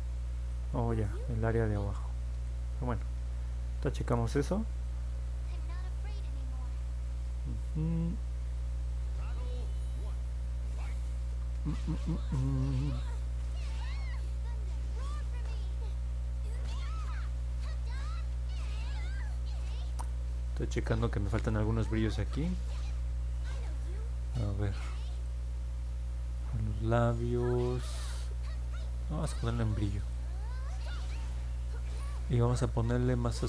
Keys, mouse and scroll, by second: 0.7 middle click, 1.5 alt+click, 3.0 alt+middle click, 3.8 scroll up 1, 4.3-6.1 alt+drag, 6.7 alt+middle click, 25.1 click, 26.1 middle click, 29.1 middle click, 29.9 click.